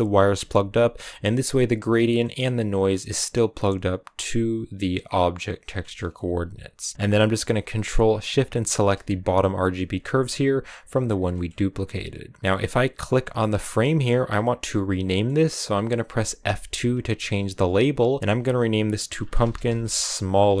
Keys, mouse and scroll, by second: 0.0-6.9 drag, 6.9-8.6 middle drag, 8.6 ctrl+shift+click, 12.9-20.6 drag.